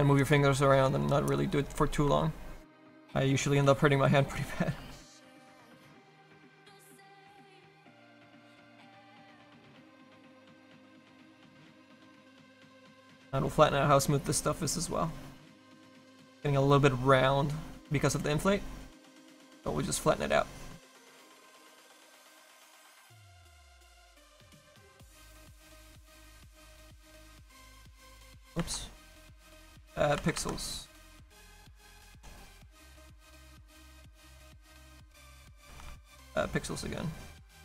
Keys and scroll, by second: 3.7 s, 4.8 s, 5.7 s, 7.7 s, 8.3 s, 28.6 ctrl+z, 28.8 ctrl+z, 30.3 ctrl+z, 30.9 s, 35.5 ctrl+z, 35.8 ctrl+z, 36.0 ctrl+z.